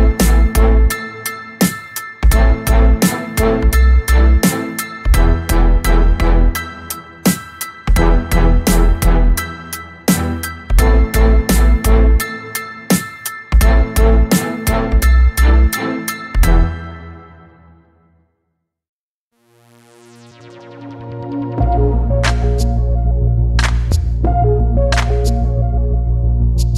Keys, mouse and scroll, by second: 2.2-2.8 ctrl+scroll up 4, 3.8 click, 4.6-5.2 ctrl+scroll down 4, 6.7 ctrl+shift+g, 7.7 click, 9.1 click, 10.4 shift+click, 15.8 shift+click, 16.5 shift+click, 17.2-17.7 ctrl+shift+scroll up 4, 18.6 ctrl+d, 19.6 ctrl+d, 20.1 ctrl+click, 23.8 ctrl+KP_Multiply, 26.1 click.